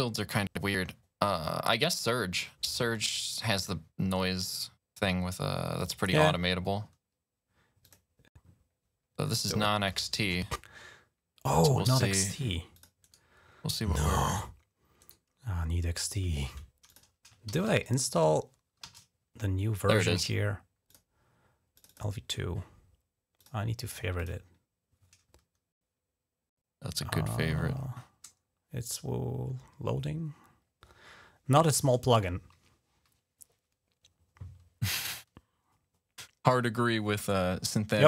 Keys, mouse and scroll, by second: 5.8 click, 7.7 click, 8.8-9.2 scroll down 2, 11.6 right click, 12.6 click, 12.9 right click, 14.1 click, 14.9 right click, 16.7 click, 16.9 click, 17.4 typing, 18.7 typing, 20.7 click, 21.6 click, 21.9 click, 23.2 click, 24.0 click, 37.9-38.0 drag.